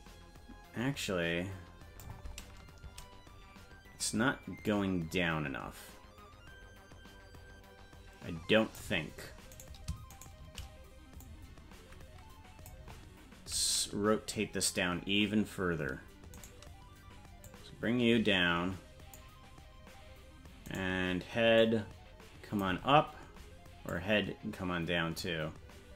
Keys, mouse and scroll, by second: 4.6-8.8 drag, 9.6 right click, 10.2 shift+right click, 11.3-12.7 drag, 16.5 right click, 17.4-19.2 drag, 20.7 right click, 21.6-22.6 drag, 23.9-25.2 drag.